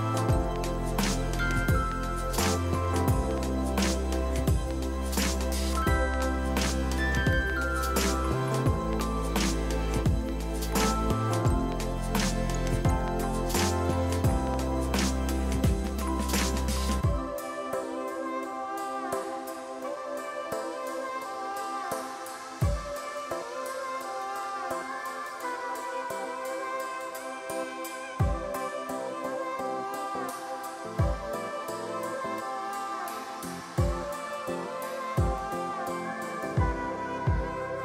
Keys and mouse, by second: 0.8 ctrl+shift+a, 0.9 click, 2.1 ctrl+1, 2.1 click, 2.3 ctrl+shift+x, 2.5 click, 2.7 Up, 3.0 click, 4.2 a, 4.3 click, 5.2 ctrl+1, 5.8 click, 5.9 ctrl+click, 6.8 click, 7.1 ctrl+d, 7.4 click, 7.8 ctrl+click, 8.4 ctrl+click, 8.8 ctrl+click, 9.1 ctrl+click, 9.8 click, 10.0 KP_8, 10.1 Return, 10.8 click, 11.0 KP_6, 11.1 Return, 11.6 click, 12.0 a, 13.0 ctrl+1, 13.1 click, 15.1 ctrl+q, 15.2 click, 15.4 ctrl+1, 15.5 ctrl+click, 16.3 ctrl+1, 16.4 click, 16.5 ctrl+q, 16.7 click, 17.2 ctrl+1, 17.3 click, 17.9-20.9 typing, 18.0 click, 19.9 click, 20.2 Return, 22.2 shift+click, 22.8 a, 22.8 click, 23.9 KP_5, 24.2 ctrl+e, 24.3 click, 24.6 ctrl+1, 24.6 click, 24.8 Delete, 25.4 a, 26.0 ctrl+1, 26.1 click, 26.4 right click, 26.7 click, 27.1 right click, 27.6 click, 34.2 click, 34.4 x, 34.5 click, 35.3 ctrl+1, 35.8 right click, 37.5 click.